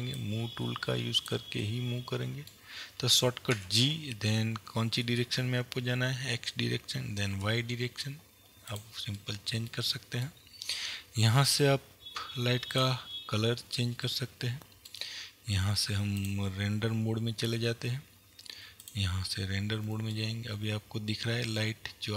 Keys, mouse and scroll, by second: 1.7-4.5 middle drag, 3.6 g, 8.8 click, 9.2-11.5 middle drag, 11.5 click, 14.1-16.8 middle drag, 16.8 click, 19.3 click, 20.2-22.1 middle drag.